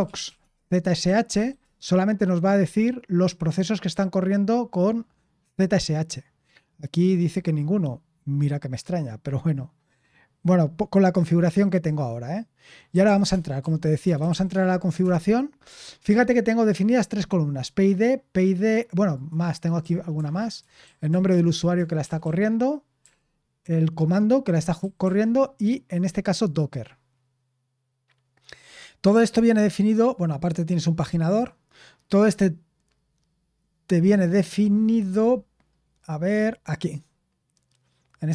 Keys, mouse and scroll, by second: 0.0-1.8 typing, 12.6-14.8 typing, 15.0 Return, 19.5-23.0 typing, 24.8 typing, 37.7-38.3 scroll up 1.